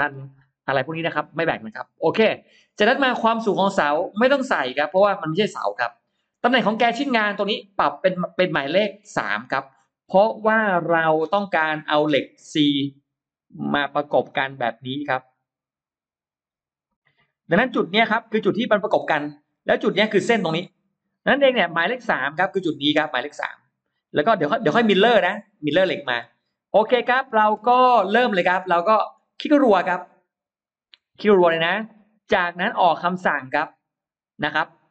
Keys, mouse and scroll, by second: 8.5 click, 10.5 shift+x, 11.1-13.8 drag, 14.1-17.3 drag, 17.9-19.0 drag, 19.5-21.1 drag, 22.5 click, 23.0 click, 24.6 click, 25.2 click, 25.9 right click, 26.9 middle click, 27.0 scroll up 1, 27.3 scroll down 1, 27.6 scroll up 1, 27.9 middle click, 28.1 middle click, 28.5 space, 29.0 click, 29.2 click, 29.4 click.